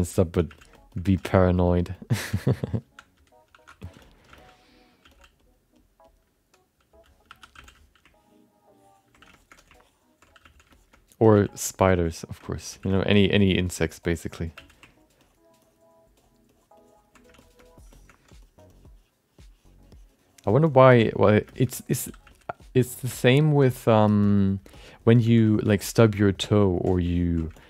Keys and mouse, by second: 0.0-1.2 typing, 0.1 alt+middle click, 0.7 middle click, 0.9 alt+middle click, 1.7 click, 1.9 click, 2.2-5.0 typing, 4.0 alt+middle click, 4.7 click, 5.4 click, 5.7 click, 6.0 click, 7.3 2, 7.5 f, 8.1 ctrl+click, 8.7 ctrl+click, 9.3 alt+shift+middle click, 9.7 ctrl+click, 10.4 f, 10.7 alt+shift+middle click, 10.9 middle click, 11.6 click, 11.8 f, 12.0 click, 12.4 middle click, 12.7 f, 12.9 alt+middle click, 13.3 click, 13.5 click, 13.9 click, 14.1 click, 14.5 f, 14.8 ctrl+click, 15.2 ctrl+click, 15.6 ctrl+click, 16.1 click, 16.5 click, 16.8 click, 17.4 middle click, 17.6 alt+middle click, 17.9 alt+shift+middle click, 18.4 click, 18.6 click, 18.7 click, 19.3 click, 19.8 click, 20.6 middle click, 21.0 click, 21.5 alt+shift+middle click, 21.6 alt+middle click, 22.2 f, 22.5 click, 22.9 click, 23.3 alt+middle click, 23.6 click, 24.0 alt+shift+middle click, 24.7 shift+middle click, 24.9 alt+middle click, 25.2 f, 25.5 alt+shift+middle click, 25.6 alt+middle click, 26.0 click, 26.6 middle click, 27.1 click, 27.5 alt+shift+middle click.